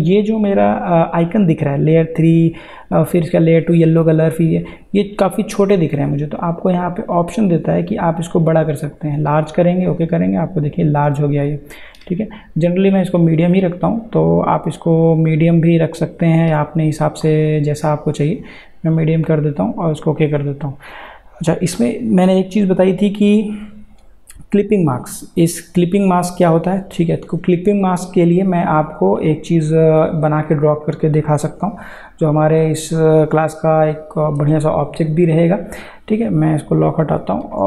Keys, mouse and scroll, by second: 8.9 click, 18.5 click, 30.4 click, 31.4 ctrl+a, 36.9 click.